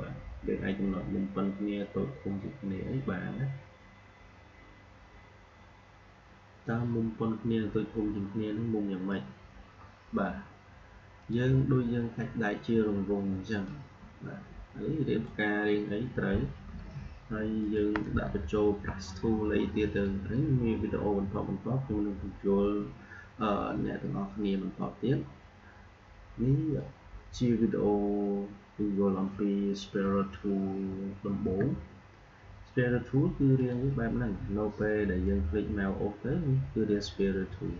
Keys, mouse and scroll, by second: 11.1 click, 13.6-17.5 drag, 17.5-22.5 drag, 24.7-29.2 drag, 31.4 Delete, 33.5-37.7 drag.